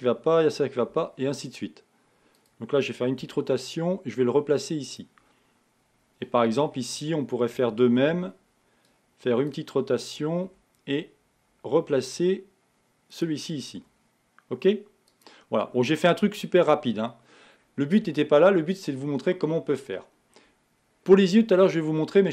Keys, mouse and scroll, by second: 6.6-7.8 scroll up 3, 7.8 a, 16.1-16.5 scroll down 2, 16.5 Tab, 17.6-19.2 scroll down 1.